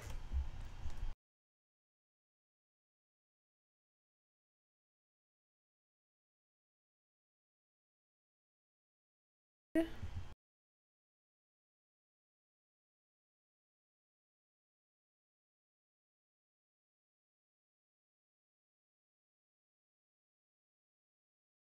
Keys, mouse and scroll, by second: 3.5 middle click, 4.3-6.0 scroll up 1, 6.0-6.8 scroll down 3, 6.8-8.3 scroll down 1, 12.9-16.1 middle drag, 20.0-21.7 scroll up 1.